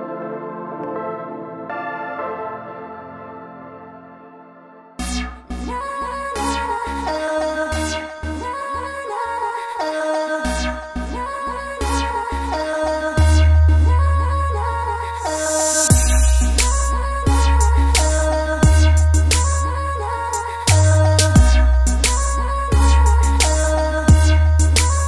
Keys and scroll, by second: 12.1 super+z, 19.5 super+z, 24.4 super+z.